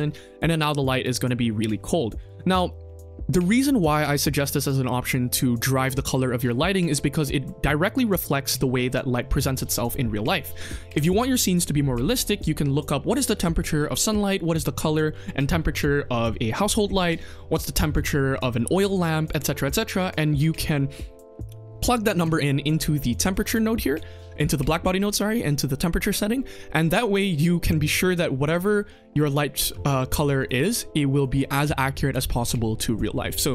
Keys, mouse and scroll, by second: 0.0 scroll down 1, 0.1 middle drag, 0.5 click, 2.1-10.9 drag, 24.3 middle click, 30.3 click, 31.1 click.